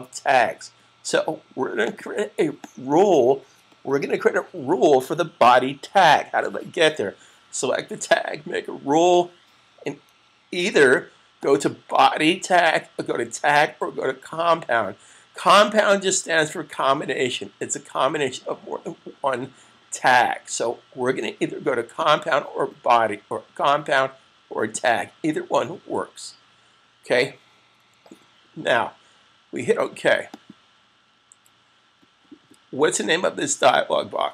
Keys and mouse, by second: 1.7 click, 11.1 click, 15.7 click, 21.7 click, 30.1 click.